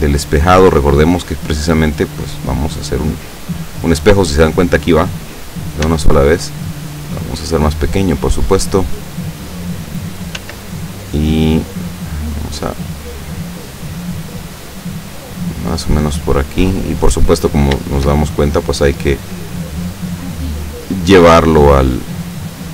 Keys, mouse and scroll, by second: 0.0-4.1 drag, 6.0 s, 7.2 click, 8.5-10.5 drag, 10.5 s, 12.8 click, 13.7-15.0 drag, 15.1-16.4 middle drag, 16.8 middle click, 17.2 scroll up 1, 17.4-17.9 scroll down 1, 17.9-18.9 shift+middle drag, 19.5-21.6 drag, 21.7-22.7 middle drag.